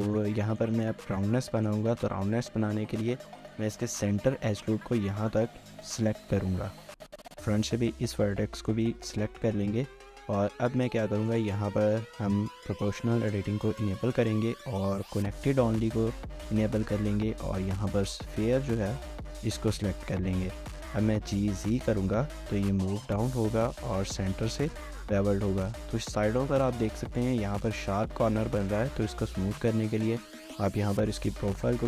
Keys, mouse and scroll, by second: 0.3 middle click, 1.3 middle click, 4.7 middle click, 5.8 ctrl+click, 6.2 middle click, 7.9 shift+click, 8.3 middle click, 9.1 middle click, 9.7 scroll up 1, 10.0 shift+middle click, 21.0 typing, 27.1 typing, 28.3-29.1 typing.